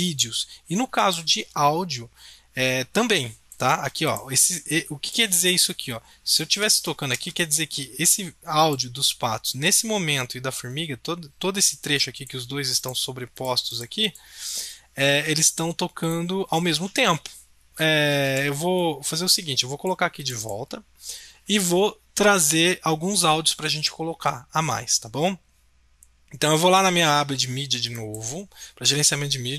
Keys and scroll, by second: 17.7 ctrl+z, 18.2 ctrl+shift+z.